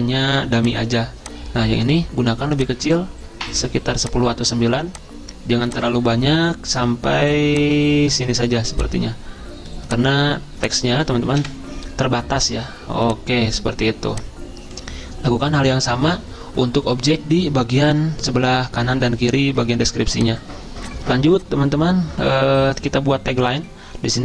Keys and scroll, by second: 11.4 Delete.